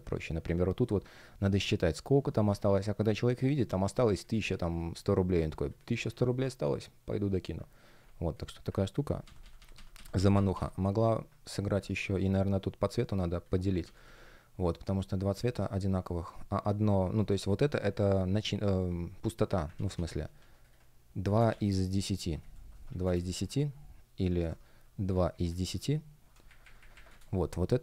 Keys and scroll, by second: 2.3 super+z, 9.1 super+z, 11.9 shift+p, 13.7 super+z, 15.2 space, 17.0 shift+p, 19.6 super+z, 21.2-23.0 typing, 24.2 Return, 25.3 space, 26.4 Left, 27.0 space.